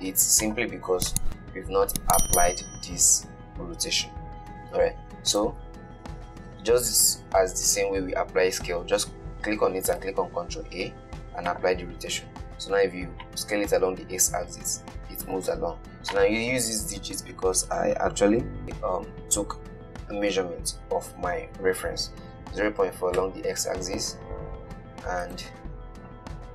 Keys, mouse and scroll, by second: 0.7-3.8 drag, 5.6 click, 10.3 ctrl+a, 13.5-18.6 drag, 24.2 Tab, 25.5-26.5 drag.